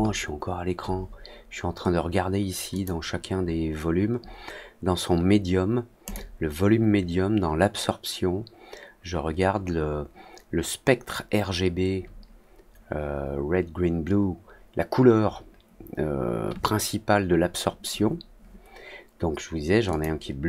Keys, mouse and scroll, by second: 2.6 click, 6.0 click, 19.8 click.